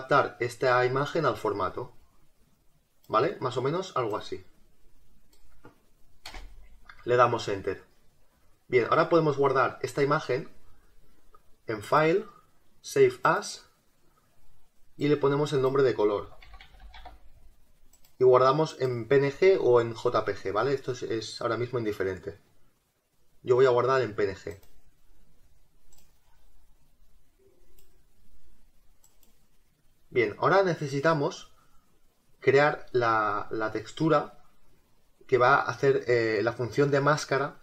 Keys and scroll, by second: 6.3 Return.